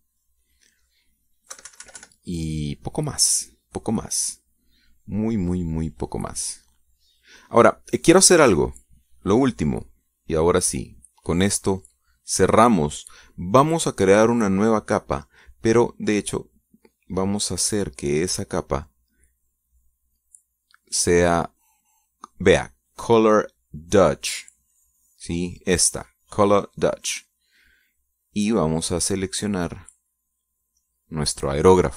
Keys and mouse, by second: 2.0 middle click, 2.6 click, 2.9 KP_Subtract, 3.7 click, 4.5 click, 4.9 middle click, 5.0-6.8 drag, 6.8-8.7 middle drag, 10.5-11.5 drag, 12.3 click, 13.6 click, 19.9 click, 20.6 click, 22.2 click, 28.5 click, 30.7 click, 31.5 click.